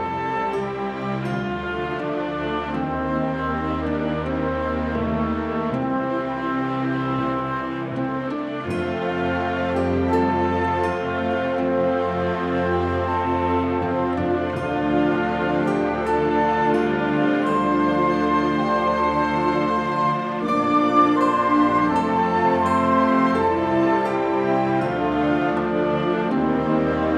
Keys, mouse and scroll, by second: 0.6 middle click, 0.8 shift+middle click, 1.0 click, 1.2 middle click, 1.4 alt+z, 1.5-2.2 scroll down 5, 1.9 Tab, 2.0 alt+a, 2.1 alt+a, 2.2 scroll up 4, 2.3 middle click, 2.5 click, 3.1 middle click, 3.1 click, 3.5 scroll down 2, 3.8 click, 4.7 click, 4.7 middle click, 5.1 click, 5.6 middle click, 5.8 s, 8.7 click, 9.4 s, 10.5 r, 11.0 scroll down 2, 11.2 scroll up 1, 11.4 click, 11.6 scroll down 1, 11.7 shift+middle click, 11.8 scroll up 1, 12.0 click, 13.2 alt+a, 13.5 click, 13.6 middle click, 13.8 shift+middle click, 14.1 alt+d, 15.0 click, 16.7 scroll down 3, 16.7 KP_Decimal, 16.8 middle click, 17.1 click, 17.3 middle click, 17.7 r, 21.0 scroll down 1, 21.0 s, 21.2-21.5 scroll up 1, 21.5 alt+a, 21.5 click, 21.5 scroll down 1, 21.7 click, 22.0 alt+a, 22.1 click, 22.3 click, 22.9 click, 23.7 r, 24.5 scroll up 4, 24.7 scroll down 4, 25.1 r, 26.1 click.